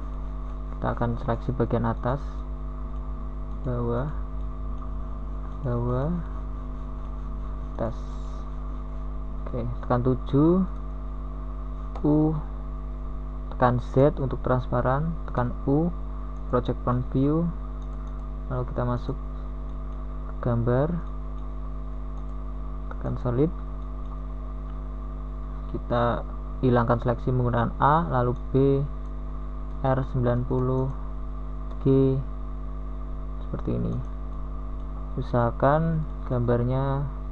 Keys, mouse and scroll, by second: 4.0 g, 7.7 s, 9.5-10.8 drag, 11.1 s, 12.7-13.6 drag, 15.4 g, 19.0 middle click, 30.4 KP_1, 31.4 KP_7, 32.3 z, 35.2 z, 35.2 u.